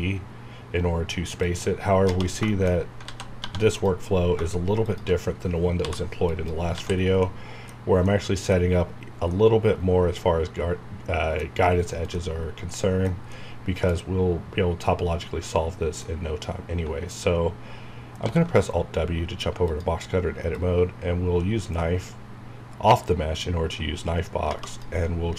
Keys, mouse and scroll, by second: 1.4 click, 2.5 shift+middle click, 2.7 scroll up 1, 3.1 alt+z, 3.7 click, 5.8 m, 6.2 click, 6.8 alt+z, 6.9 alt+scroll down 2, 7.2-9.0 middle drag, 8.9 scroll down 1, 9.3-14.3 middle drag, 14.3 scroll up 1, 15.5-15.8 scroll down 1, 16.0-18.2 middle drag, 18.2 alt+w, 19.6-25.1 drag, 25.1 scroll up 1.